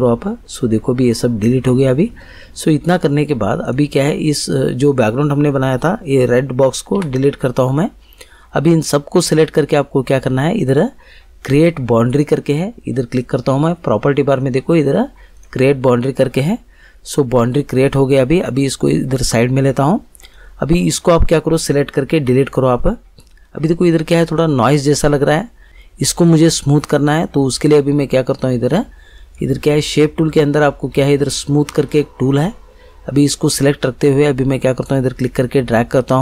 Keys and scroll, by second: 6.9 Delete, 22.1 Delete.